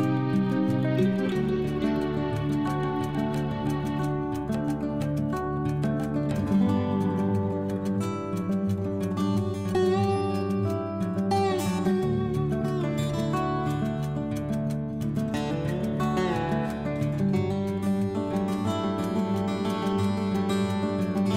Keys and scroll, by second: 3.0 Down, 4.3 Right, 7.2 F12, 8.2 2, 11.9 Down, 12.6 Right, 16.3 Left.